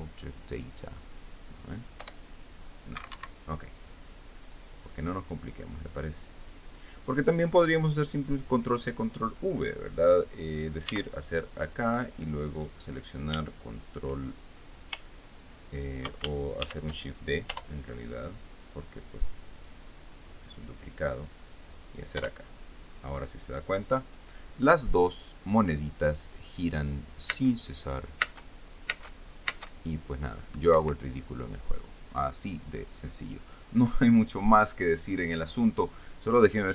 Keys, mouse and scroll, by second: 1.3 click, 2.7 p, 3.6 Escape, 5.1 right click, 6.8 click, 11.5 x, 12.0 click, 13.2 right click, 17.3 shift+d, 18.2 Return, 19.2 click, 20.3-22.2 drag, 22.8 p, 28.9 space, 30.7 space, 31.4 Escape.